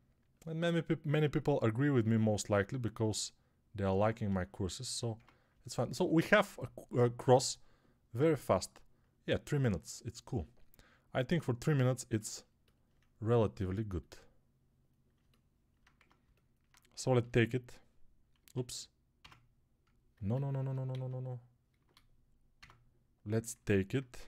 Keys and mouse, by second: 5.0 Tab, 15.8 Tab, 17.1 s, 20.7 z, 22.4 Tab, 24.0 s.